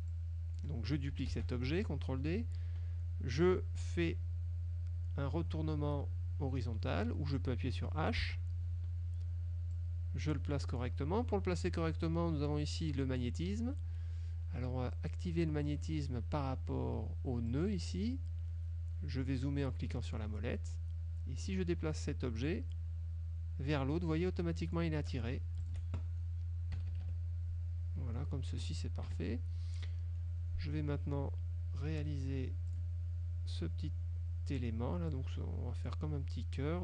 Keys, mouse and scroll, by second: 0.2 click, 1.4 ctrl+d, 8.3 h, 9.8-11.1 drag, 17.6 click, 19.5 middle click, 20.1 click, 21.6-25.0 drag, 25.8 shift+click, 26.8 KP_Subtract, 28.2 click, 29.2 KP_Subtract, 30.0 click, 32.8 click, 35.2 click.